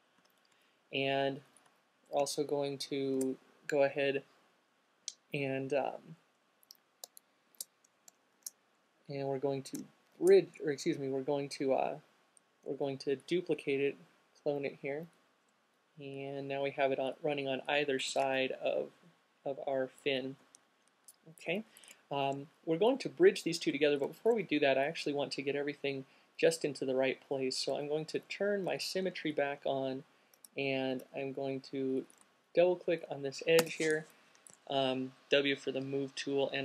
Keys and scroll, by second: 0.4 q, 1.8 alt+shift+q, 3.3 shift+f, 6.8 shift+f, 8.6 c, 18.3 q, 30.6 alt+space, 31.2 space, 33.3 w.